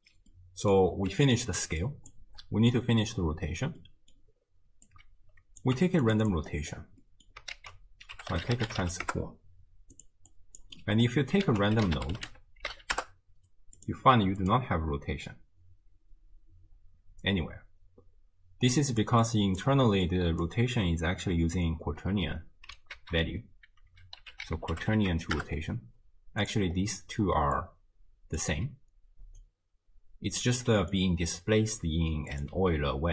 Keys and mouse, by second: 0.3-0.7 middle drag, 1.5 d, 1.8 click, 2.1 d, 2.3 d, 3.2 d, 3.8-4.2 middle drag, 4.9-5.6 drag, 5.8 g, 6.3 drag, 7.0 middle drag, 7.6 ctrl+a, 10.4 drag, 10.8 drag, 11.5 ctrl+a, 14.4-19.0 drag, 19.2 drag, 20.1-20.5 drag, 23.0 ctrl+a, 27.1-29.3 d, 27.6 click, 29.4-30.6 drag, 29.4 d, 30.6 d, 30.7 drag, 30.7 d, 32.3 click, 32.6 x.